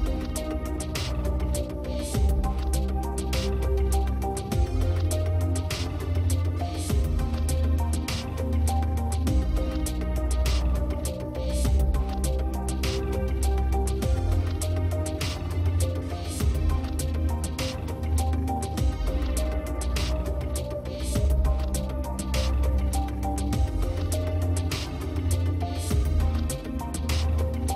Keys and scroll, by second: 13.6 space.